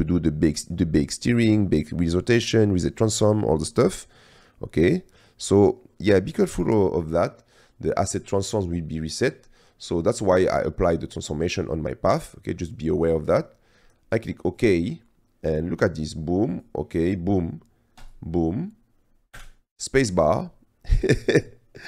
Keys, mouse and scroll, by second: 8.4-14.4 drag, 18.2 click, 19.4 space.